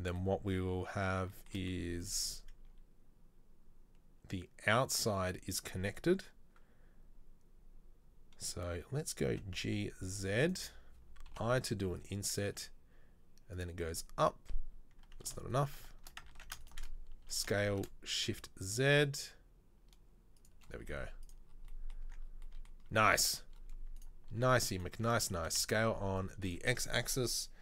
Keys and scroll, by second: 9.5 g, 11.5 i, 12.7 e, 16.4 ctrl+z, 17.4 s, 20.9 z, 22.1 Tab, 23.1 Tab, 25.4 s.